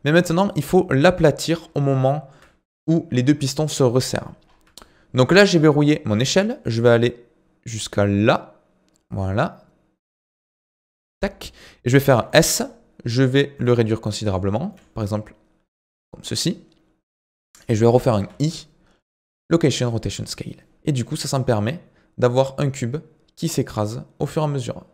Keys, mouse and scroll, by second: 0.2-1.5 drag, 1.5-2.0 scroll up 5, 2.0-4.4 shift+middle drag, 4.4 scroll up 2, 4.8-6.5 shift+middle drag, 6.5-9.6 drag, 13.5 s, 20.8-24.9 drag.